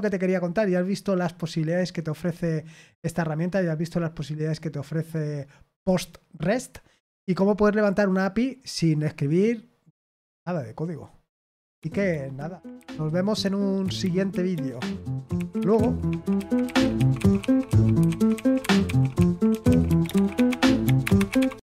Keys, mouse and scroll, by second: 11.7 super+x, 21.6 click.